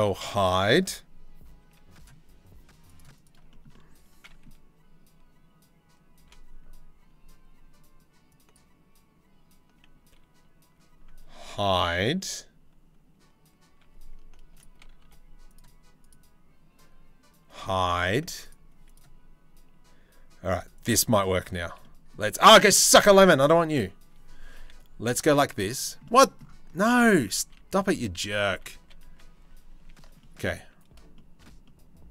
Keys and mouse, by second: 1.2 c, 5.8 2, 8.0 click, 10.9 h, 11.7 1, 14.1 click, 14.6 3, 15.6 click, 17.1 h, 20.1 1, 20.1 c, 21.4 click, 22.5 ctrl+z, 24.2 c, 25.6 click, 26.5 ctrl+z, 26.7 ctrl+z, 27.0 ctrl+z, 27.2 ctrl+z, 27.4 ctrl+z, 27.7 ctrl+z, 28.0 ctrl+z, 28.3 ctrl+z, 28.6 ctrl+z, 28.9 ctrl+z, 29.3 ctrl+z, 29.8 click, 30.7 shift+click.